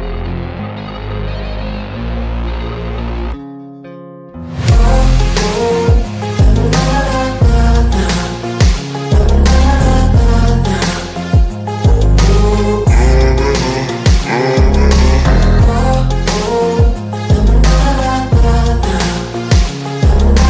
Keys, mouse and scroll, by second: 4.0 right click, 5.1 click, 6.6 right click, 6.7 right click, 7.3 click, 8.7 click, 9.2 click, 10.2 ctrl+z, 10.8 click, 11.9 right click, 12.7 click, 14.6 Delete, 15.2 click, 15.6 Delete, 16.0 click, 16.4 Delete, 16.8 click, 17.1 Delete, 17.6 click, 18.0 Delete, 18.4 click, 18.9 Delete, 19.3-20.4 drag.